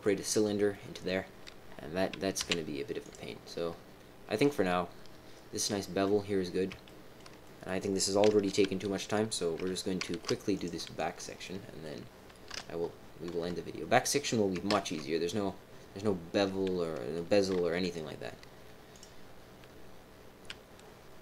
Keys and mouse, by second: 0.0 middle click, 0.7 middle click, 2.3 z, 3.4-6.0 middle drag, 6.8 shift+middle click, 7.4 middle click, 10.1 alt+h, 10.5 click, 10.9 click, 11.4 click, 11.6 middle click, 12.4 KP_3, 13.4 KP_1, 14.6 ctrl+KP_1, 16.8 click, 17.7 KP_3, 18.9 click.